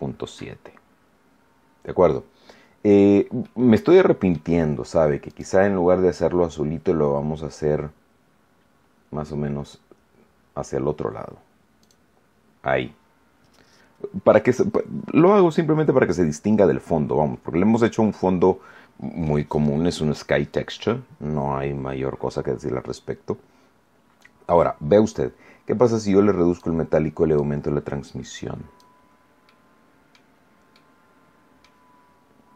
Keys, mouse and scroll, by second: 0.5 scroll down 1, 3.4 middle click, 3.4 scroll down 1, 5.2 click, 5.5-10.2 middle drag, 11.7 click, 15.2-19.4 middle drag, 23.5 scroll up 1, 25.8 click, 27.3-28.9 drag, 29.4 middle click, 30.7 middle click, 31.0 scroll down 1.